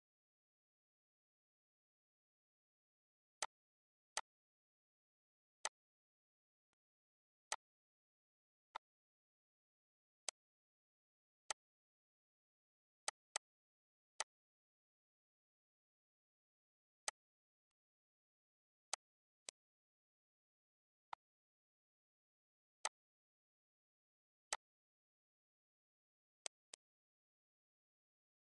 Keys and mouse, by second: 1.8 click, 2.6 click, 4.3 click, 5.3 click, 6.2 ctrl+alt+click, 7.6 click, 9.2 click, 10.4 click, 11.8 click, 12.9 click, 16.0 click, 16.7 click, 17.8 click, 19.9 click, 21.7 click, 23.2 click, 25.0 click, 27.1 ctrl+s, 27.2 ctrl+s, 28.1 click.